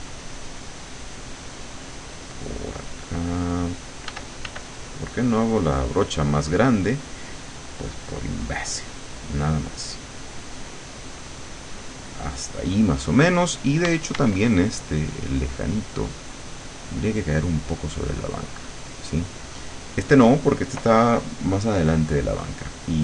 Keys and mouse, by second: 3.1-4.6 drag, 4.1 f, 4.7-12.7 drag, 13.9 d, 14.5-16.9 drag.